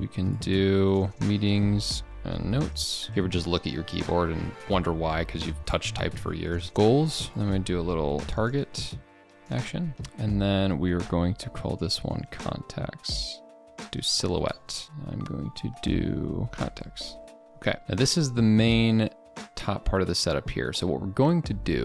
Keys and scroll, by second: 1.1 ctrl+a, 3.1 ctrl+b, 6.1 ctrl+a, 7.3 ctrl+b, 7.3 ctrl+v, 7.3 ctrl+z, 13.7 ctrl+BackSpace, 14.8 ctrl+a.